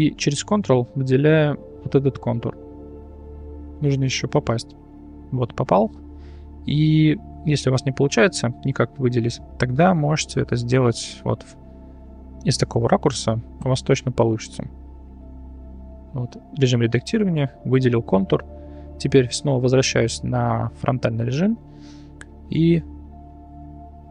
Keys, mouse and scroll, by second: 2.3 ctrl+click, 4.2 ctrl+click, 7.7-8.7 middle drag, 9.4 click, 10.2 click, 10.8 middle click, 11.4 middle click, 12.3 middle click, 13.9 click, 14.3 Tab, 15.3 Tab, 17.1 ctrl+click.